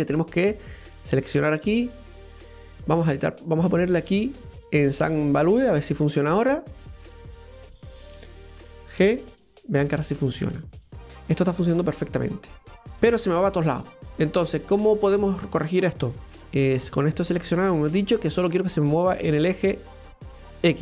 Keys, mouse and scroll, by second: 1.0 right click, 2.1-5.2 right drag, 6.8-7.8 middle drag, 7.8 right click, 9.0 g, 16.4 alt+g, 19.0 click, 19.4 click.